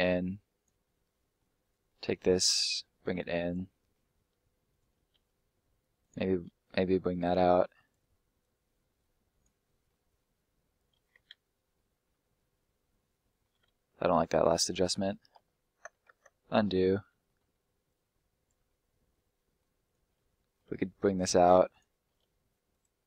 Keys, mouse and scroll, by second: 0.8 middle click, 1.8 middle click, 2.7 click, 3.7 middle click, 4.7 right click, 5.1 e, 5.9 click, 6.4 s, 7.8 click, 9.6 middle click, 10.0 scroll down 1, 10.1 middle click, 11.7 middle click, 14.1 ctrl+z, 16.1 ctrl+z, 16.7 middle click, 17.8 click, 18.7 middle click, 19.8 right click, 20.1 middle click, 20.6 e, 21.6 click, 22.0 s, 22.6 click, 22.9 middle click.